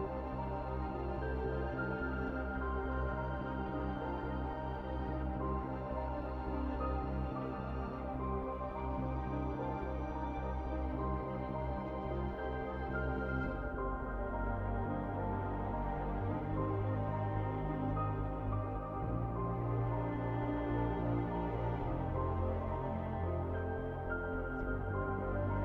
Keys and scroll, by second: 0.0-0.8 typing, 2.6-4.4 typing, 8.4-15.4 typing, 16.4-19.2 typing, 21.1-22.5 typing, 23.9-24.8 typing.